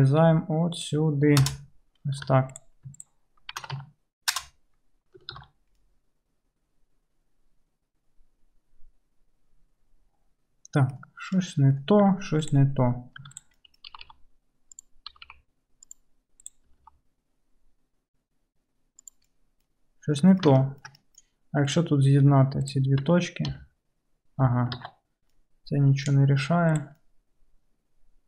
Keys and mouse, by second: 2.4 2, 2.6 click, 3.0 shift+click, 3.6 shift+e, 5.4 alt+z, 5.9 middle click, 6.5 middle click, 6.8-21.7 middle drag, 12.1 2, 13.3 2, 13.3 1, 13.4 click, 14.0 g, 15.2 g, 21.7 click, 21.8 middle click, 22.7 shift+click, 22.8-27.8 shift+middle drag, 23.5 j, 24.8 ctrl+z, 27.9-28.2 middle drag.